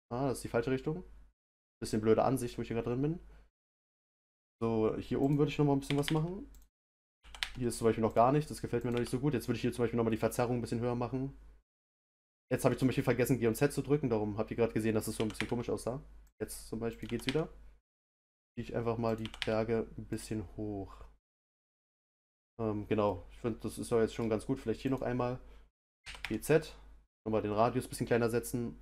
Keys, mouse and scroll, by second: 1.6 click, 1.9-5.2 middle drag, 5.2 click, 5.8 g, 7.0 click, 7.2 g, 8.8 click, 8.9 g, 15.1 g, 16.9 click, 17.0 g, 19.0 click, 19.2 g, 21.4 click, 21.9 scroll down 1, 22.5-23.0 scroll up 1, 23.0-24.8 middle drag, 24.8 click, 26.0 g.